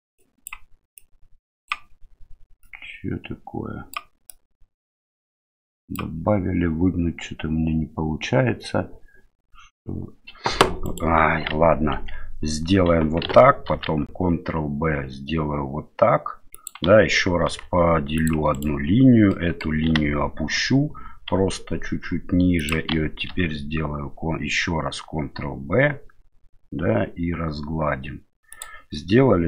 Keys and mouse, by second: 0.2 click, 1.0 click, 2.6-3.9 drag, 4.3-5.9 drag, 10.8 right click, 11.5 ctrl+z, 11.9 ctrl+z, 13.7 ctrl+b, 17.4 ctrl+r, 19.4 middle click, 19.8 g, 23.3 ctrl+b.